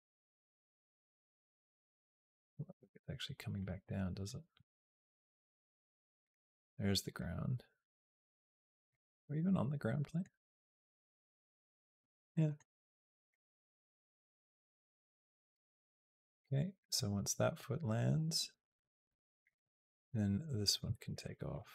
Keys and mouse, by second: 2.4 g, 3.6 middle click, 3.9 g, 4.4 g, 7.0-8.7 drag, 8.9-10.0 middle drag, 10.3 g, 12.1 middle click, 13.1-15.3 drag, 15.8 click, 16.8-19.3 drag, 20.4 click, 21.0 shift+click, 21.3 shift+click.